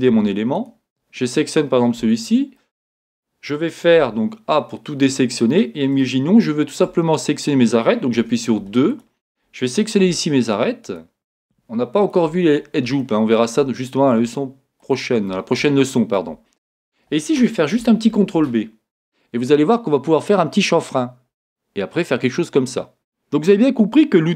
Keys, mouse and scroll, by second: 0.1 a, 0.6 click, 2.0 Tab, 2.6-8.9 middle drag, 4.0 a, 4.9 scroll up 2, 8.2 2, 8.9 click, 10.9 shift+click, 12.0 shift+click, 12.6 scroll down 1, 13.0-14.8 shift+middle drag, 15.0 shift+click, 15.8-22.4 shift+middle drag, 16.6 scroll up 2, 18.1 ctrl+b, 22.8-24.3 middle drag.